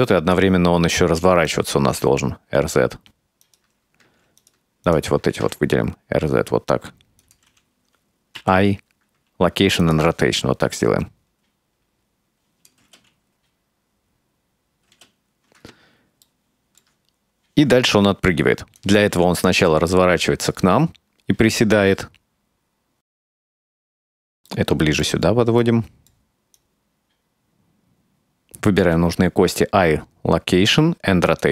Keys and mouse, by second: 1.5 right click, 1.9 r, 4.5 right click, 4.9 shift+right click, 5.4 r, 8.4 i, 10.7-12.8 drag, 12.9 space, 15.0 space, 16.3 shift+middle click, 18.7 click, 19.1 r, 20.6-22.7 right drag, 23.3-24.4 right drag, 24.5 middle drag, 25.0 middle drag, 25.5-26.9 right drag, 27.8 shift+right click, 28.1 shift+right click, 28.9 i.